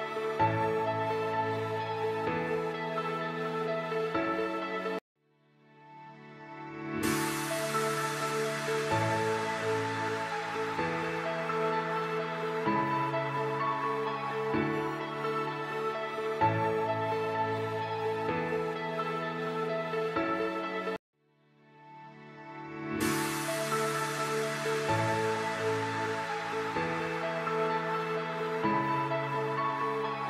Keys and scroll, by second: 4.7 F4, 7.8 shift+F2, 8.2 F3, 13.4 alt+c, 14.7 F4, 16.8 shift+F2, 17.2 F3, 18.2 c, 21.7 space, 22.4 shift+Page_Down, 22.9 alt+c, 26.3 shift+Page_Down, 27.5 alt+c, 28.4 F4.